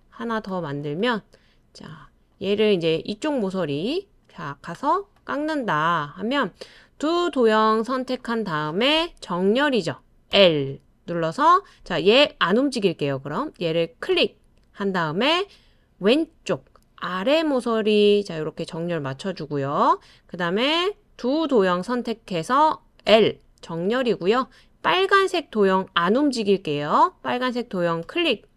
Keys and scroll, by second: 23.1 typing.